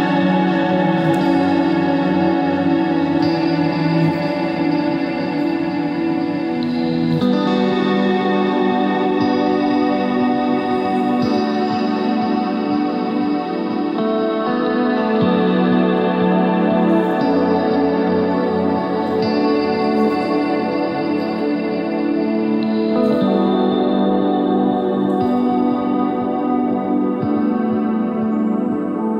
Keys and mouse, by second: 0.6 click, 3.0 click, 3.9 click, 5.5 click, 8.5 e, 10.5 s, 12.7 Tab, 14.9 middle click, 16.1 Tab, 16.7 ctrl+r, 17.6 ctrl+Tab, 22.1-24.1 drag, 24.4 s, 26.5 click, 27.4 click, 27.5 Tab.